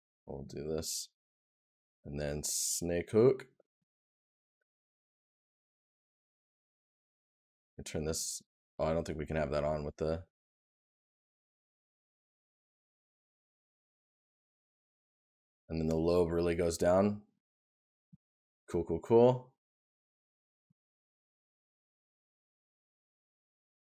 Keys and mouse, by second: 17.7 right click.